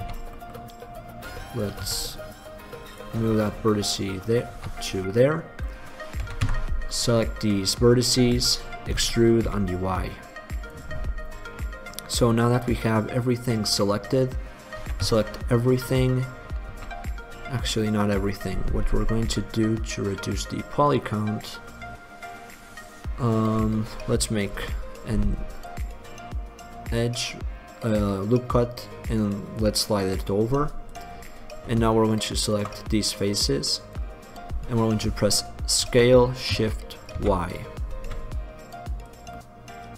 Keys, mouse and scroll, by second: 0.1 z, 1.1 middle click, 2.0 z, 4.3 middle click, 4.7 z, 6.3 a, 6.6 a, 9.1 e, 11.0 click, 11.8 middle click, 13.0 middle click, 14.0 middle click, 14.9 a, 15.1 a, 16.9 a, 18.2-20.1 middle drag, 21.3 middle click, 21.5 middle click, 24.7 ctrl+r, 32.1 click, 33.4 middle click, 34.1-35.2 drag, 35.9 s, 39.4 click, 39.5-39.9 middle drag.